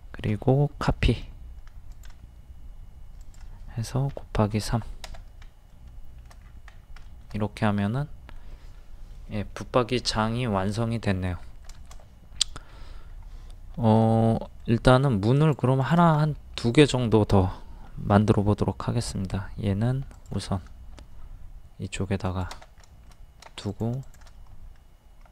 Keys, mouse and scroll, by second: 0.9 m, 3.2 click, 4.5 KP_3, 5.7 middle click, 6.4 scroll down 1, 7.0 scroll up 1, 7.1 shift+middle click, 10.1 scroll up 1, 10.4-10.8 scroll down 1, 10.8 middle click, 11.2-11.6 scroll down 2, 11.2 middle click, 11.9 shift+middle click, 12.7 scroll up 1, 14.0 ctrl+z, 14.4 middle click, 15.4 shift+click, 16.2 middle click, 16.3-16.6 scroll down 1, 18.1 m, 20.1 ctrl+click, 22.9 shift+middle click, 23.7 click, 24.0 shift+click.